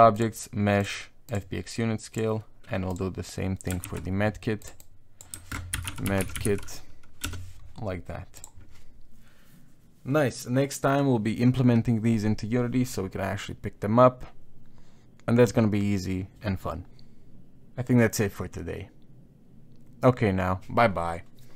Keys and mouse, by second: 2.9 click, 3.9 shift+e.